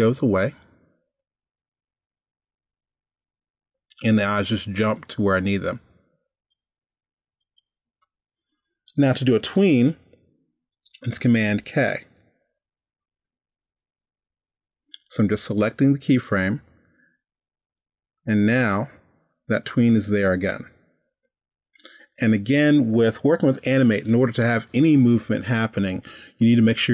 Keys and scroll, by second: 12.1 super+k.